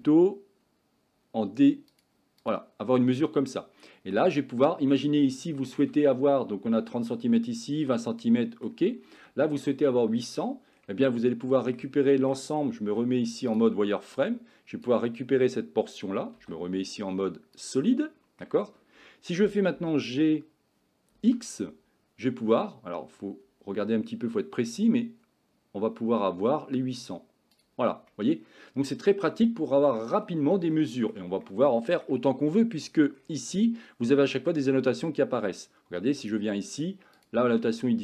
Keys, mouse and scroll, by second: 3.3 middle click, 4.4 middle click, 5.6 shift+middle click, 8.3 middle click, 11.1 middle click, 12.0 shift+middle click, 12.9 z, 14.2 click, 16.4 z, 18.1 middle click, 19.8 g, 28.2 middle click, 30.7 shift+middle click, 31.5 middle click, 36.3 click, 37.2 click.